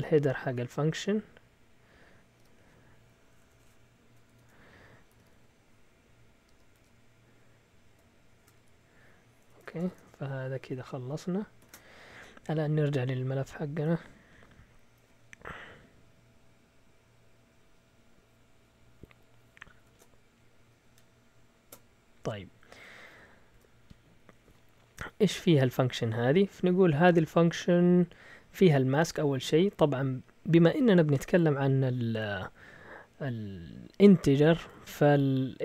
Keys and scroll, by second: 0.0-1.1 typing, 2.3 typing, 4.3-6.7 typing, 8.1-10.4 typing, 9.4 Escape, 11.6 ctrl+shift+o, 13.3 Up, 19.7 ctrl+shift+w, 23.0 a, 23.5 Tab, 34.2 Right, 34.5 Right, 34.6 Right, 34.7 Right, 34.9 Right, 35.0 Right.